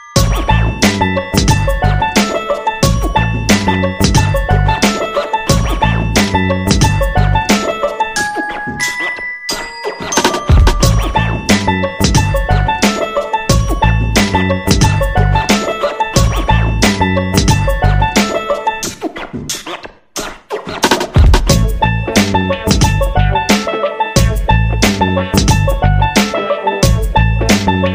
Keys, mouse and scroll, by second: 1.4 shift+click, 3.2 click, 6.3 shift+click, 7.0 shift+click, 8.8 click, 11.0 shift+click, 11.6 shift+click, 12.7-22.8 drag, 23.6-25.6 drag, 27.2 ctrl+scroll down 1.